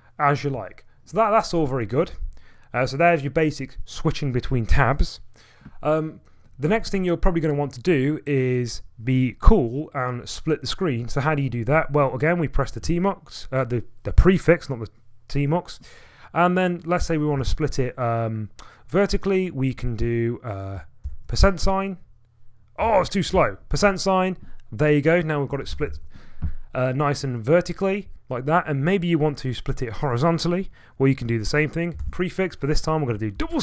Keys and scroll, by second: 0.5-1.6 typing, 2.1 Delete, 2.2 Delete, 12.8 ctrl+a, 17.4 ctrl+a, 21.0 %, 22.8 ctrl+a, 23.3 ctrl+a, 25.4-26.4 typing, 32.0 ctrl+a, 33.3 ".